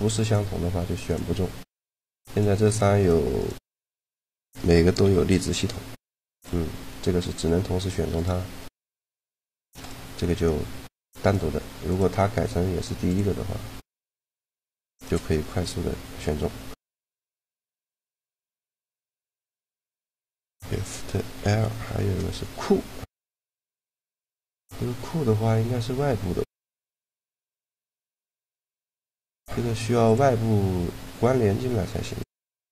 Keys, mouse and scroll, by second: 0.1-2.5 drag, 1.7-5.5 right drag, 4.8 shift+l, 7.0 middle click, 7.3 a, 7.9 right click, 8.8 shift+l, 12.8 click, 13.8-15.6 right drag, 14.5 shift+l, 16.0-19.2 middle drag, 19.2-21.0 drag, 21.3 shift+l, 28.6-30.2 middle drag, 29.8 click, 29.8 right click, 30.7 click.